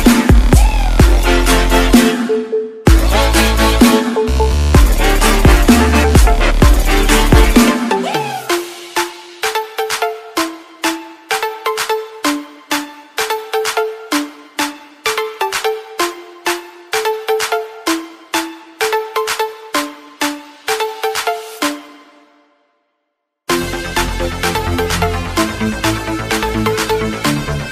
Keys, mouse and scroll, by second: 1.4 click, 4.0 z, 5.2 click, 10.9-11.9 alt+scroll down 3, 12.1-12.5 scroll up 2, 12.6 click, 13.4-14.0 scroll down 3, 14.3-15.9 typing, 16.0 click, 17.2 scroll down 1, 21.2 click, 21.8 space, 22.6 click, 22.8 Right, 23.4 click, 23.8 BackSpace, 24.4 Right, 25.6 alt+scroll up 1.